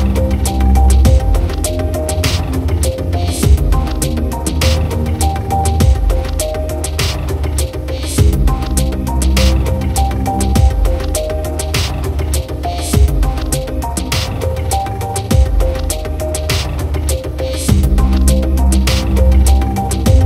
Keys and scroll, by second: 4.2 ctrl+t.